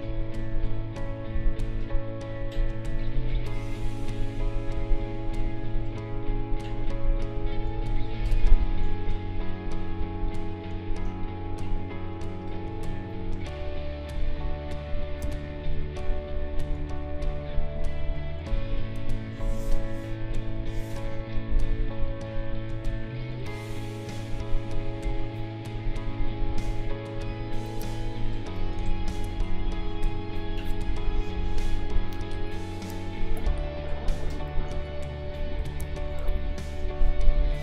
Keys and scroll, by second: 1.3 q, 22.0 Up, 29.0 ctrl+shift+a.